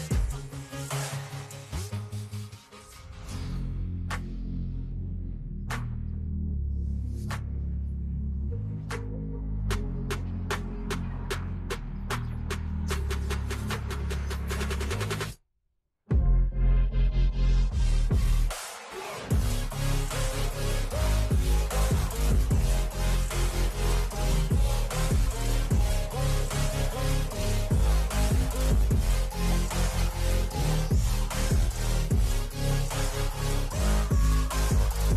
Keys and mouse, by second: 0.6 click, 1.0 space, 1.5 click, 2.6 click, 3.3 click, 6.3 u, 8.9 click, 10.4 ctrl+z, 12.0 click, 13.6 click, 16.1 click, 20.2 click, 21.2 click, 23.6 click, 24.9 KP_0, 25.1 KP_0, 26.4 Return, 28.2 click, 30.0 click, 31.7 KP_0, 32.1 KP_Enter, 34.5 click.